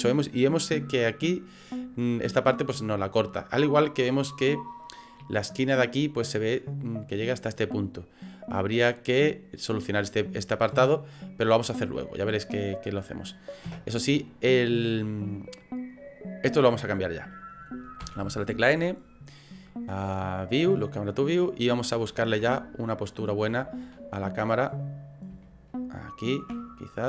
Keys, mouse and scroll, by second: 7.4 middle click, 13.8 KP_0, 18.1 n, 21.1 click, 22.6 shift+middle click, 23.9 ctrl+middle click, 24.5 middle click, 25.5 ctrl+middle click, 26.7 ctrl+middle click.